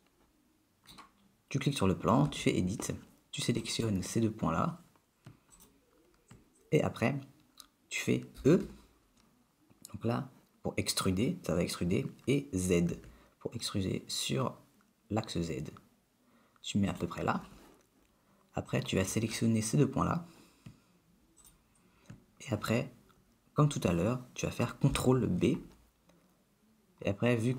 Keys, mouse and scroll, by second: 0.2 shift+middle click, 2.5 Tab, 3.8 click, 5.7 shift+click, 8.5 e, 18.8 click, 21.5 shift+click, 25.0 ctrl+b.